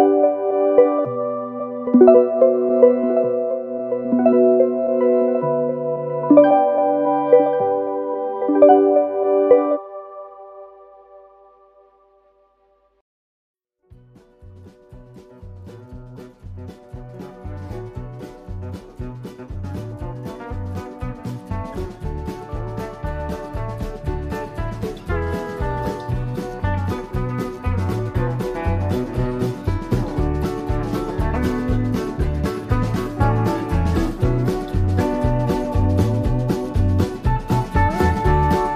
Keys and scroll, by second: 3.9 Right, 4.0 Up, 5.8 i, 16.1 super+[, 18.7 Up, 18.9 Left, 24.3 Right, 25.4 i, 33.8 Left, 36.8 super+-.